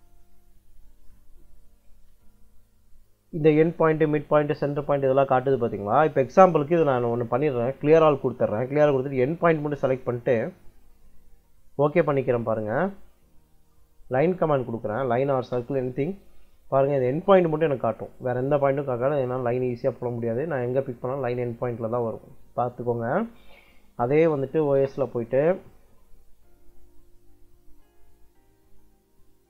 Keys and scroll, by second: 14.8 l, 15.2 space, 23.0 Escape, 24.2 o, 24.5 s, 24.7 space.